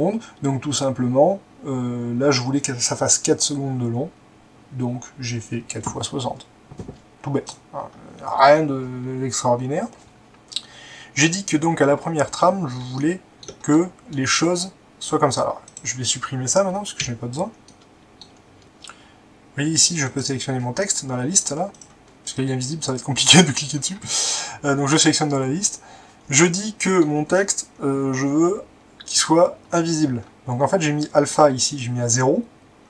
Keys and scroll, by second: 17.0 Delete.